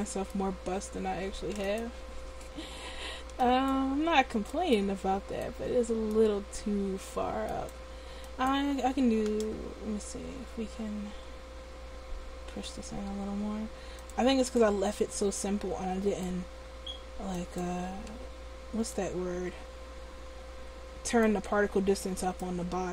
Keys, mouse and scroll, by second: 1.8 right click, 2.7 Tab, 7.7-9.8 right drag, 9.8 s, 14.3-15.3 drag, 22.4-22.9 right drag.